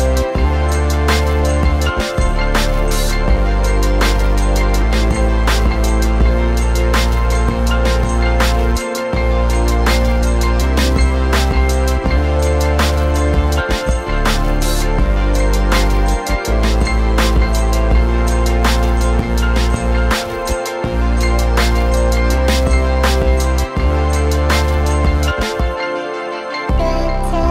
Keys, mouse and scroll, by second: 0.2 click, 1.6 click, 3.4 click, 3.9 m, 4.3 a, 4.3 click, 5.2 m, 5.4 click, 20.1 click, 24.7 click, 25.3 click.